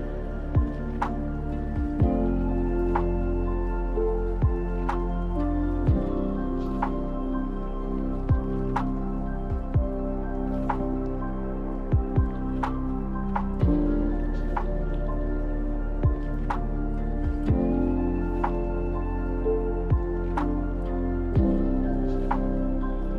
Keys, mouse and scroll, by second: 0.7 KP_1, 1.1 KP_5, 1.4 KP_5, 2.2 e, 6.7-7.8 middle drag, 7.8-8.2 scroll down 3, 8.2-9.8 drag, 9.8 scroll up 2, 10.2 middle click, 11.0 ctrl+z, 12.4-13.5 drag, 13.5 middle click, 13.9 w, 15.9-18.1 shift+drag, 18.8-21.2 drag.